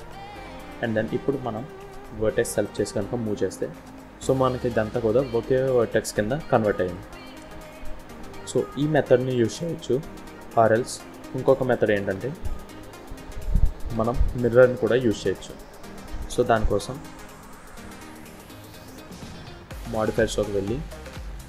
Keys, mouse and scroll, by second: 0.4-1.2 scroll up 2, 1.2 click, 2.7 g, 7.3-7.6 scroll down 2, 7.6 middle click, 8.7 scroll down 1, 9.2 middle click, 10.2 ctrl+z, 10.9 ctrl+z, 11.1-12.1 ctrl+z, 12.8 ctrl+z, 13.5 ctrl+z, 13.9 ctrl+z, 14.2 ctrl+z, 14.4-14.9 ctrl+z, 15.6 middle click, 17.6 click.